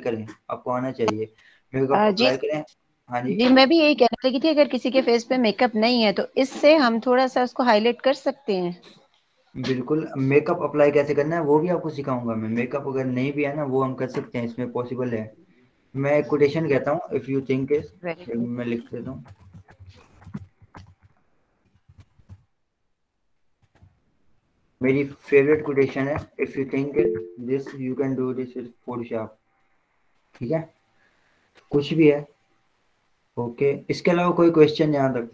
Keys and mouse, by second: 16.7 click, 17.5-25.7 typing, 26.3 Return.